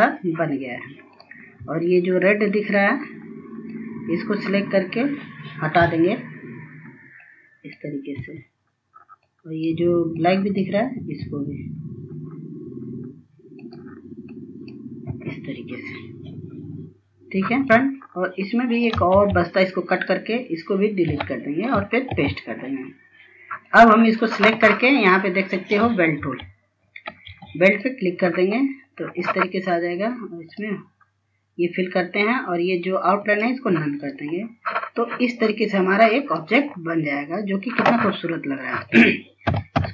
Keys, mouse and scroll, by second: 0.7-1.4 scroll down 1, 1.8 ctrl+space, 2.6-3.3 scroll up 1, 3.3 click, 8.0 Delete, 9.4 click, 10.4 Delete, 11.4 click, 13.4 Delete, 15.9 click, 17.3 Delete, 17.7 scroll up 1, 18.5 click, 18.8 ctrl+x, 19.6 click, 20.8 Delete, 21.8 ctrl+v, 22.4-22.8 scroll down 1, 23.4 click, 25.9 ctrl+s, 26.8 ctrl+s, 27.5 click, 28.3-29.0 scroll up 1, 30.3 click, 33.0 right click, 33.8 click, 34.1 scroll down 1, 34.8 click, 36.5 scroll up 1, 37.0 scroll down 1, 38.4 click, 39.4 KP_9.